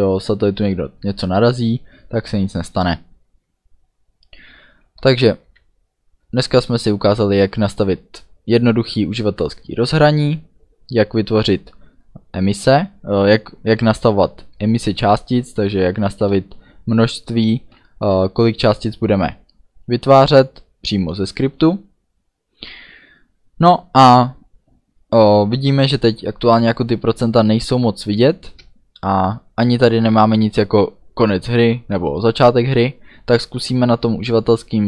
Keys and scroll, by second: 5.7 a, 6.4 d, 13.8 a, 15.7 d, 16.3 a, 17.4 d, 21.3 d.